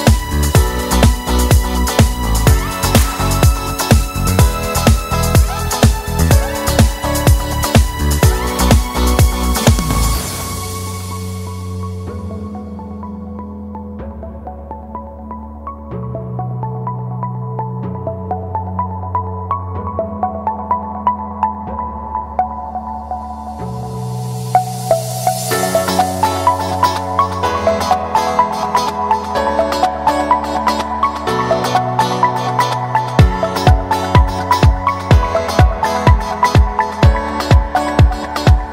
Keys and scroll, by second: 15.4 space, 22.2 space, 22.8 shift+space, 31.3 space, 35.5 space.